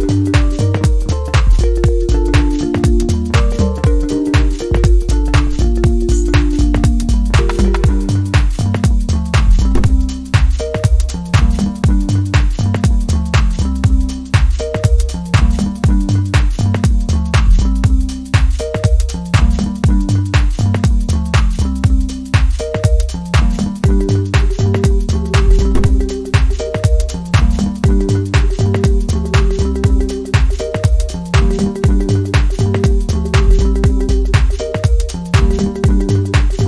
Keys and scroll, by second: 0.1 scroll up 1, 0.3 scroll down 1, 0.5 scroll up 1, 0.6 scroll down 1, 0.7 scroll up 1.